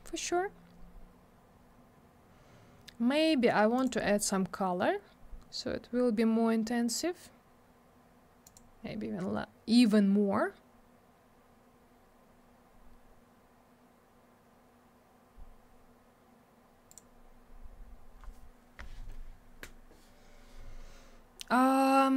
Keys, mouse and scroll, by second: 3.8 click, 3.8 click, 8.5 click, 8.5 click, 16.9 click, 17.0 click.